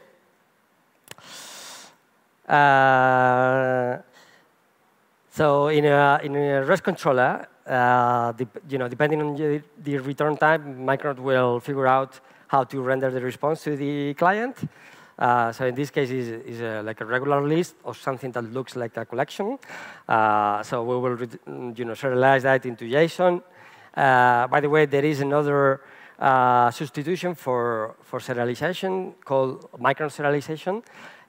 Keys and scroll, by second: 1.3 super+s.